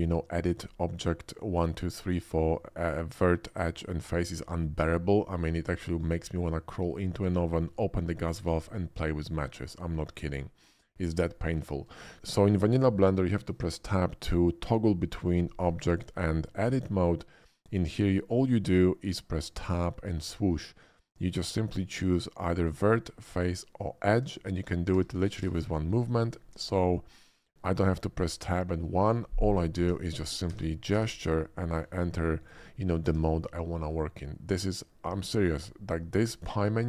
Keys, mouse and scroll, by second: 5.2 middle click, 7.1-7.5 shift+middle drag, 10.1 shift+middle drag, 10.9 shift+middle click, 11.3 shift+middle click, 12.0 shift+middle click, 19.6 Tab, 20.2 Tab, 29.8 Tab, 30.2 Tab, 30.6 Tab, 32.4 click.